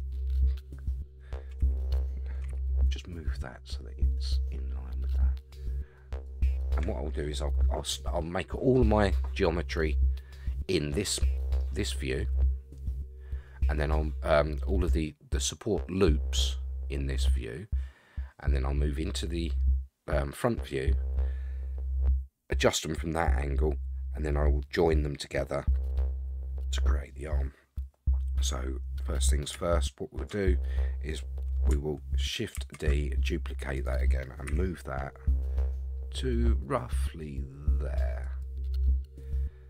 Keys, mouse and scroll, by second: 1.6 a, 2.5 g, 28.6-29.5 scroll down 1, 29.7 shift+middle click, 30.4 scroll up 3, 32.5 shift+d, 34.4 g.